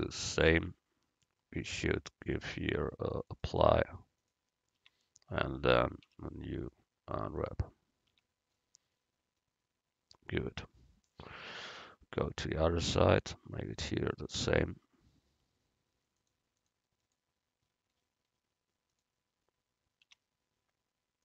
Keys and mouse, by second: 0.1 Tab, 0.5 Tab, 4.9 Tab, 6.1 u, 8.2 Tab, 13.9 right click, 14.5 Tab, 17.7-19.1 drag, 20.2 Tab.